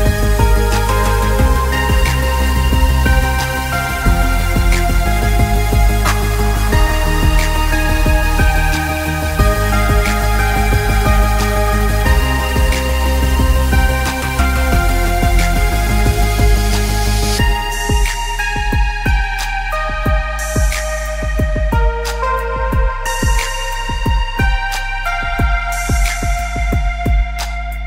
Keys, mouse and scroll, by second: 0.1 alt+scroll down 1, 0.9-1.3 alt+scroll up 2, 3.0 click, 19.3 click, 20.4 alt+scroll down 1, 21.9 alt+scroll up 1, 23.4 click.